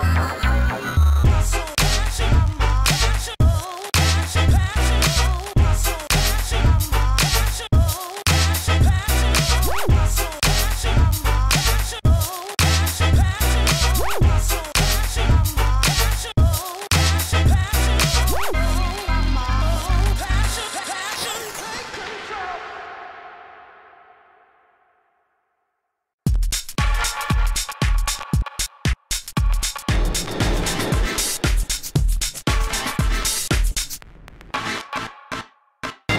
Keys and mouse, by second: 0.1 g, 1.2 Tab, 1.6 g, 1.8 Tab, 2.5 x, 3.4 x, 4.5 KP_3, 4.8 KP_1, 6.9-10.8 typing, 12.2 a, 12.3 b, 12.5 g, 13.6 g, 14.6-16.1 drag, 14.8 right click, 15.0 Tab, 15.1 Tab, 15.4 g, 16.1 e, 17.4 f, 17.5 a, 18.8 g, 19.6 Tab, 20.9 KP_1, 24.2 Tab, 24.4 a, 24.8 a, 24.9 b, 25.2 g, 25.9-27.0 drag, 27.7 Tab, 27.7 click, 28.7 Tab, 30.7 Tab, 30.9-31.7 typing, 33.2 Tab, 34.0 KP_1.